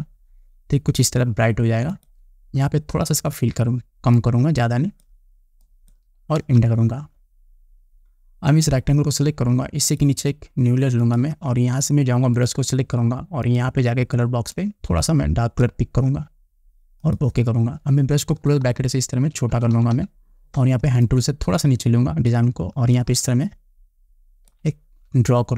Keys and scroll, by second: 7.0 Return, 18.9 [.